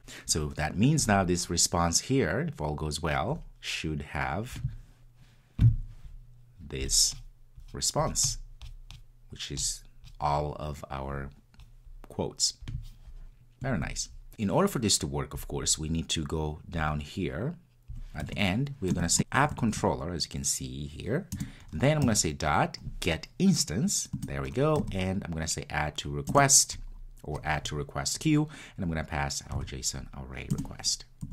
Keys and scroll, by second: 21.5 Return, 30.6 Return.